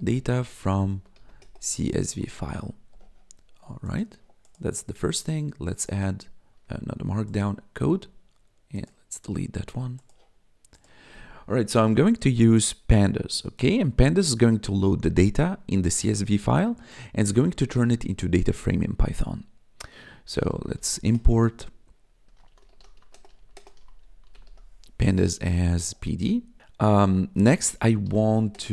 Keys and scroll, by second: 0.0-2.8 typing, 6.5 Escape, 20.3-24.9 typing, 27.1-28.7 typing.